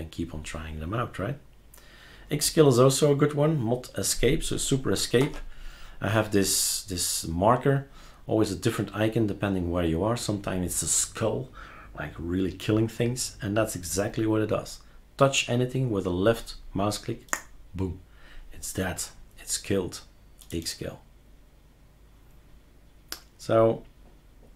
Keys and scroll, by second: 5.2 super+Escape.